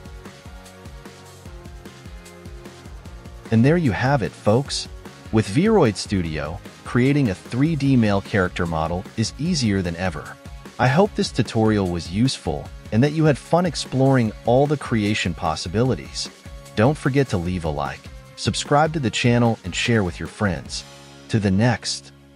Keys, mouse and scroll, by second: 2.3 ctrl+a, 5.9-6.7 scroll down 2, 6.7 right click, 8.8 ctrl+a, 11.6 scroll down 1, 11.7 scroll up 1, 12.8 click, 13.2-14.0 scroll up 2.